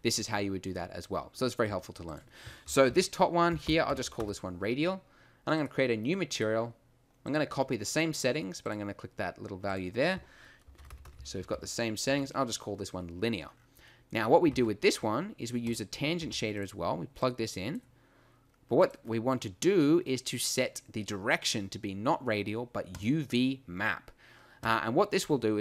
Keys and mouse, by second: 14.5 shift+a, 16.2 g.